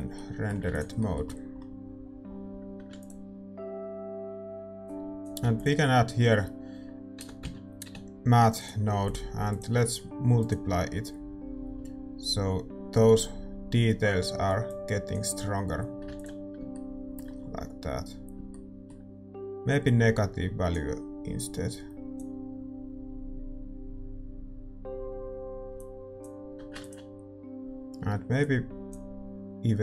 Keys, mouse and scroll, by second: 0.1-4.9 middle drag, 4.2 ctrl+s, 4.9-9.0 drag, 9.1-16.8 drag, 16.4 ctrl+s, 16.8-21.4 middle drag, 19.9-22.2 drag, 23.4-29.8 drag, 27.4 ctrl+s.